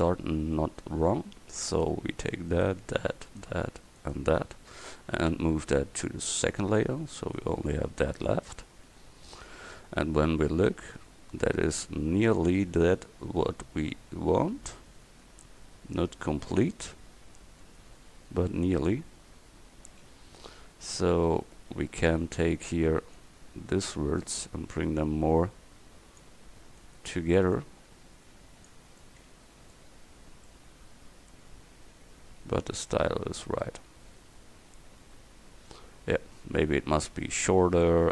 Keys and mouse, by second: 5.4 m, 7.8-8.3 middle drag, 16.7-18.1 middle drag, 18.1 Tab, 20.1 a, 21.1 c, 21.6-23.2 drag, 24.6-26.2 drag, 26.8 right click, 27.6-28.7 drag, 28.7 right click, 29.0 click, 29.2 click, 29.4 click, 29.9 Tab, 32.4-33.1 middle drag, 35.2-36.0 middle drag, 37.4 KP_1.